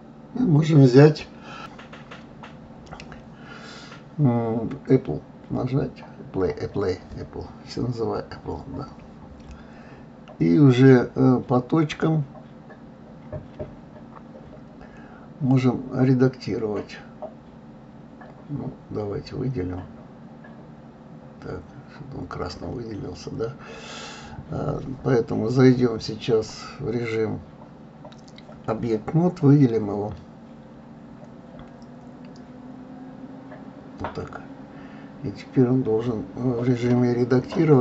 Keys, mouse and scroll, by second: 1.3 click, 1.8-4.8 drag, 5.1-9.0 drag, 10.1 click, 11.6-13.6 drag, 15.1-17.8 drag, 19.1 click, 21.2-22.7 middle drag, 22.7 click, 24.4 click, 29.7 click, 31.0 click, 32.2-33.8 drag, 34.2-37.2 middle drag.